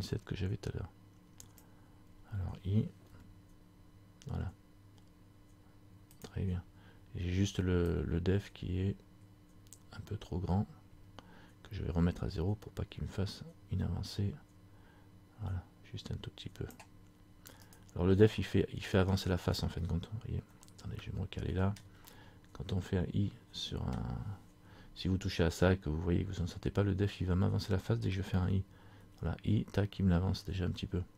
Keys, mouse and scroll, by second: 8.0 click, 17.8 right click, 18.5 middle click, 19.3-19.6 scroll down 1, 20.7 shift+middle click, 20.7 shift+scroll up 1, 22.0 shift+scroll down 1, 22.3 middle click, 22.3 scroll up 1.